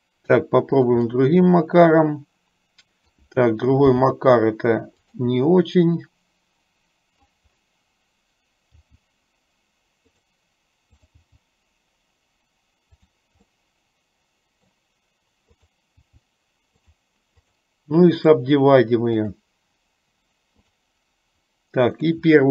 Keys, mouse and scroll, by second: 1.3-3.3 middle drag, 3.9 g, 6.1-7.4 middle drag, 8.9 g, 11.2 click, 11.6 g, 13.7-14.9 middle drag, 16.2 g, 17.6 click, 19.1-22.5 right drag.